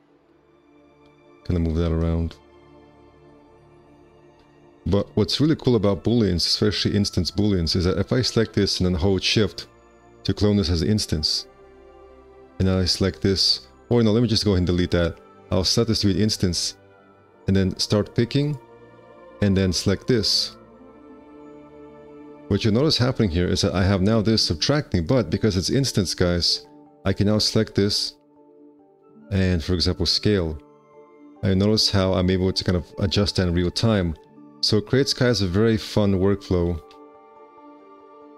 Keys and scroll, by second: 0.3 1, 1.3 ctrl+a, 4.1 1, 4.3 q, 5.5 ctrl+z, 7.8 w, 14.8 x, 26.0 `, 28.1 alt+x, 28.9 r, 36.9 q.